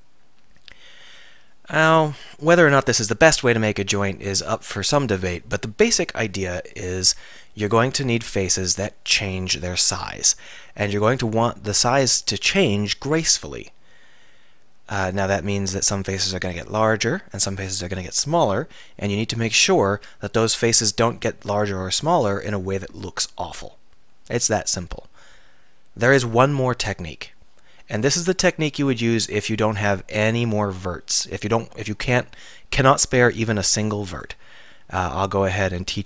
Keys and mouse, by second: 29.0 click, 29.3 Tab, 33.8 x, 34.7 click.